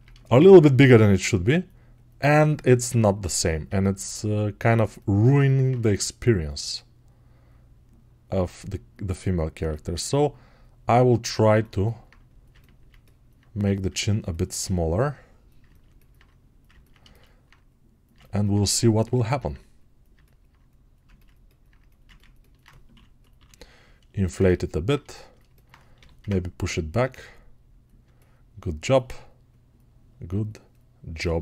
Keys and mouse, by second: 14.3-20.4 right drag, 20.4-27.9 drag, 27.9-31.0 alt+right drag, 31.0-31.4 alt+drag.